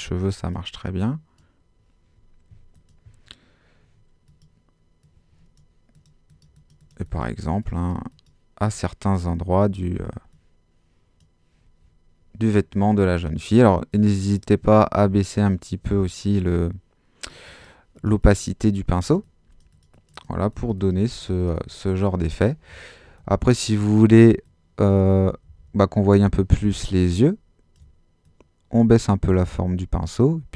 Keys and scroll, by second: 25.4 super+z.